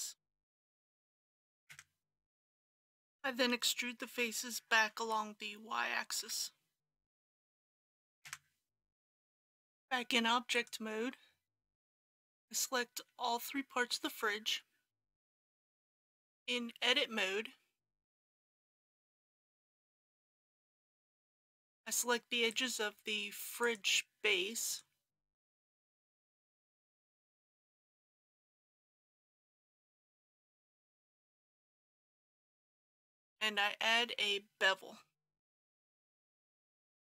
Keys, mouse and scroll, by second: 0.5 KP_Decimal, 0.9 KP_1, 2.7 middle click, 5.0 e, 6.2 y, 7.4 KP_Decimal, 7.6 KP_4, 9.0 click, 11.5 shift+click, 15.6 Tab, 16.3 2, 17.9-19.2 middle drag, 20.1 click, 21.5 alt+a, 22.5 click, 24.7 shift+click, 25.7 shift+click, 26.8 shift+click, 27.9 middle click, 28.4 shift+middle click, 28.8 shift+click, 29.8 middle click, 30.4 alt+shift+click, 31.4 shift+click, 32.2 middle click, 35.7 ctrl+b.